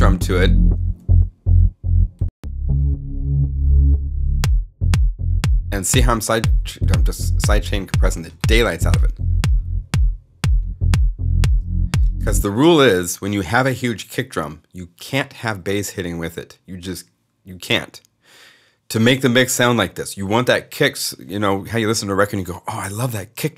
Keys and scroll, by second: 0.9 alt+s, 11.9 space.